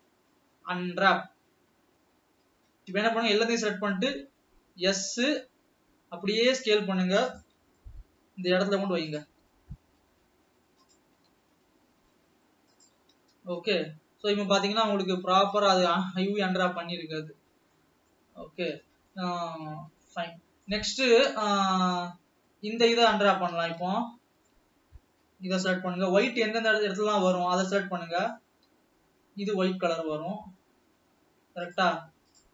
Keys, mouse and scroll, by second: 3.0 a, 4.3 s, 7.9 g, 9.9 s, 11.3 g, 18.5 scroll down 2, 18.7-22.1 middle drag, 22.1 scroll down 3, 22.4-23.4 middle drag, 23.4 scroll up 2, 24.2 alt+a, 24.4-26.6 middle drag, 26.6 l, 27.1-27.5 scroll down 3, 27.6-28.8 middle drag, 28.8-29.1 scroll up 4, 29.7-30.3 middle drag, 30.3 scroll up 1, 30.8 l.